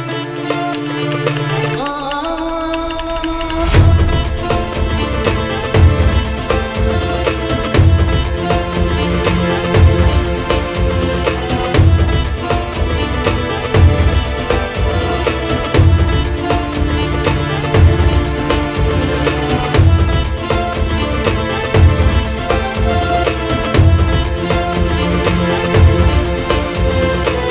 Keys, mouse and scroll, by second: 0.4-2.4 drag, 2.5-4.6 drag, 4.6 g, 6.1 middle click, 6.7 Tab, 6.9 s, 7.5 Tab, 8.7-9.0 scroll up 11, 9.0 middle drag, 9.2-9.7 scroll down 6, 9.7-10.0 drag, 10.0-10.4 middle drag, 10.4 g, 11.4 click, 11.7 middle click, 11.9 click, 12.3-12.8 scroll up 8, 12.8-14.9 drag, 14.9-15.8 middle drag, 15.8 click, 16.1 g, 16.2 g, 16.8 click, 17.1 g, 18.5 ctrl+s, 19.5 click, 20.0 KP_0, 20.6 click, 20.9 KP_0, 20.9 KP_0, 21.8 g, 22.8 ctrl+s, 23.8-24.9 drag, 25.1 scroll up 5, 25.3 z, 25.5-25.9 middle drag, 25.9 click.